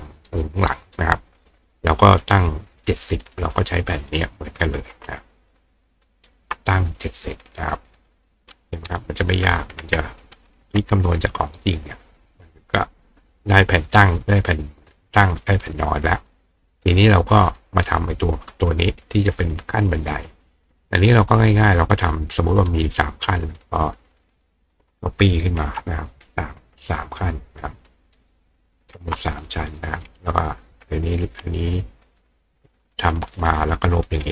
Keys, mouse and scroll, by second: 3.5-6.3 drag, 6.1 ctrl+right click, 7.9 click, 12.1 click, 13.4 click, 14.1 click, 15.5 click, 16.5 click, 20.1 click, 22.5-23.6 drag, 22.7 right click, 26.1-26.9 drag, 27.6 ctrl+click, 27.9 ctrl+right click, 29.3 click, 29.8 click, 32.1 click, 33.4 click, 33.9 click.